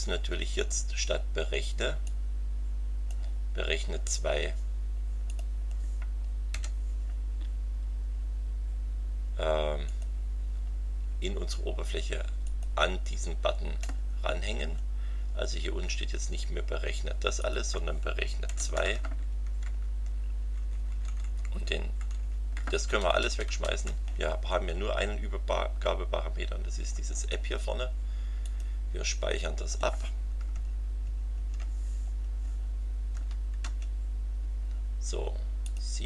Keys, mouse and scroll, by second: 2.0-3.3 drag, 5.3 click, 6.5 e, 9.8 click, 12.4 click, 13.4-14.2 scroll down 4, 14.7 scroll down 2, 17.4 click, 18.5 2, 18.7 Right, 20.4 Delete, 22.8 BackSpace, 24.4-24.7 scroll down 2, 28.4 click, 30.5 alt+Tab, 33.1 Up, 33.6 Return, 35.6 click.